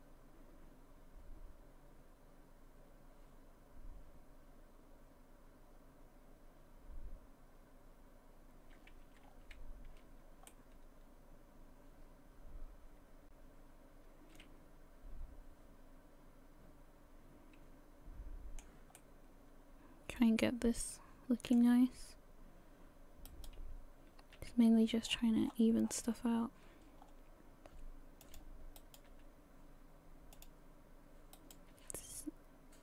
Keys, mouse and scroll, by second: 9.2-10.5 scroll down 4, 9.8-10.5 scroll up 1, 10.5 middle click, 15.9 middle click, 23.3 right click, 24.4 g, 28.8 right click, 29.1 g, 31.4 right click, 31.7 g.